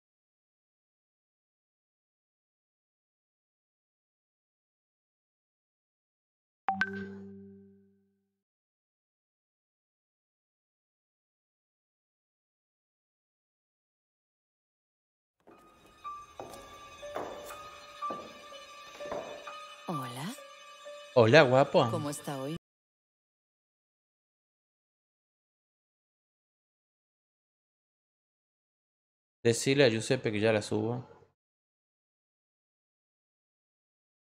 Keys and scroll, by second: 9.4-10.7 typing, 10.7 Return, 11.3 ctrl+v, 12.9 Return, 13.8-17.1 typing.